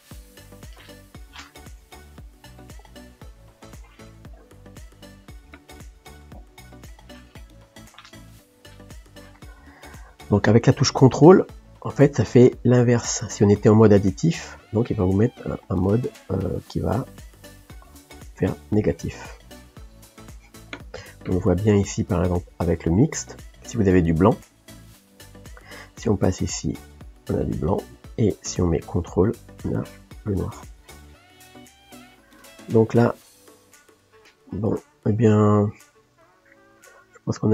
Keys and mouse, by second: 4.3-5.7 drag, 5.7-7.5 middle drag, 7.5-9.0 drag, 9.0-11.1 middle drag, 11.1-18.0 ctrl+drag, 18.0 middle click, 18.8-24.6 ctrl+drag, 24.6-26.9 middle drag, 26.9-30.5 drag, 30.5-35.6 middle drag, 35.6 click, 36.0-37.5 middle drag.